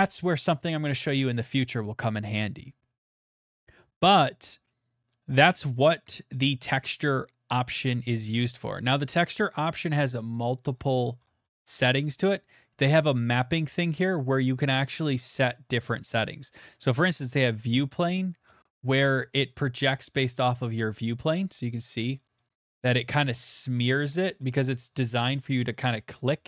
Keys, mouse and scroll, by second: 5.7-9.2 scroll, 10.0 scroll, 10.1 click, 10.6-11.5 scroll, 12.8 click, 12.8 scroll, 17.1 click, 17.8 middle click, 18.5 shift+middle click, 18.9 middle click, 19.3 shift+middle click, 19.6 middle click, 20.6 click, 21.3 middle click, 23.0 click, 23.6 middle click, 24.3 scroll, 24.8 scroll, 25.7 click, 26.2-26.4 scroll.